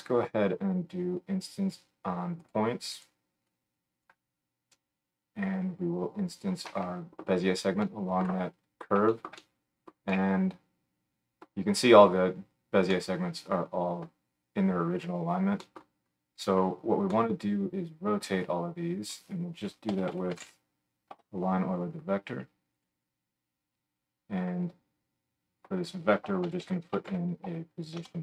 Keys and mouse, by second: 3.1-3.5 middle drag, 3.5-22.9 drag, 22.9-25.0 middle drag, 25.0-28.2 drag.